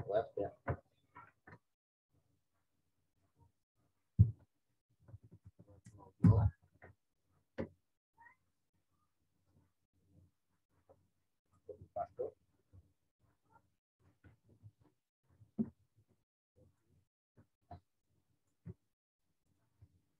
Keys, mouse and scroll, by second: 2.8 click, 5.2-5.8 typing, 6.2 Return, 9.4 click, 11.4 right click, 13.9 click, 14.9 alt+Tab, 15.7 ctrl+v, 16.7 click, 18.6 w, 19.4 click.